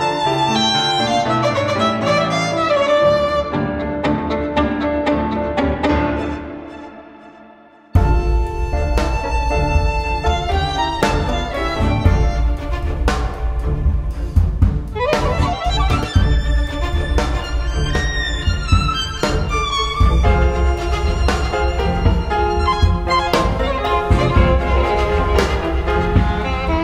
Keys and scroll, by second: 12.3 ctrl+u, 12.3-14.8 typing, 16.1 BackSpace, 23.9-26.1 typing.